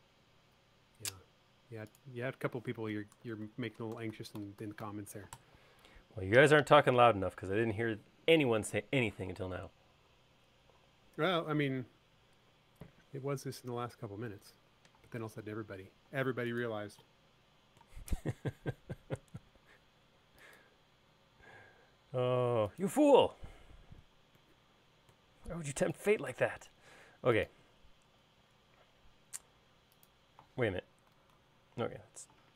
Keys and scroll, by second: 3.6-5.9 typing, 5.9 Return, 17.0 space, 20.2 l, 24.2 space, 26.1 e, 27.7 space, 31.6-32.5 typing.